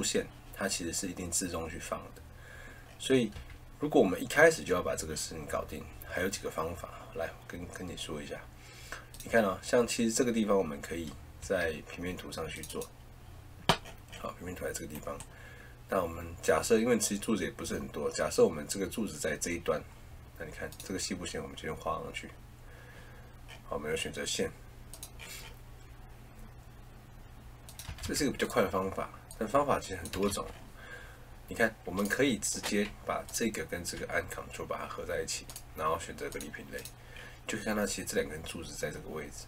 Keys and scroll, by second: 3.3 Escape, 11.3 Escape, 27.8 Escape, 30.0 Escape.